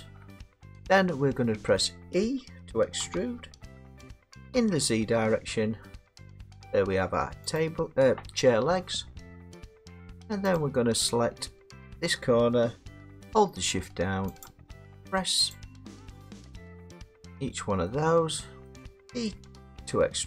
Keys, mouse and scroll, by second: 0.0 shift+click, 0.5 middle click, 0.7 middle click, 0.9 scroll, 1.8 middle click, 3.0 e, 3.1 scroll down 3, 4.5 z, 5.3 scroll, 7.6 click, 8.4-8.7 scroll, 8.7 middle click, 9.4 middle click, 10.6 click, 14.5 shift+click, 15.6 shift+click, 16.5 shift+click, 17.9 middle click, 18.7 middle click.